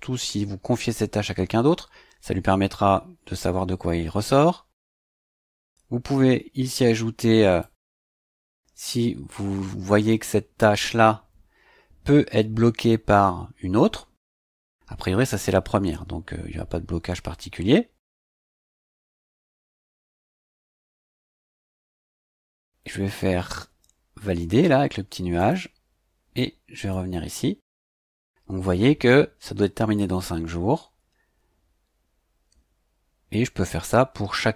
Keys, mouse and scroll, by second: 5.3 click, 7.6 click, 18.2 click, 25.4 click, 26.9 click.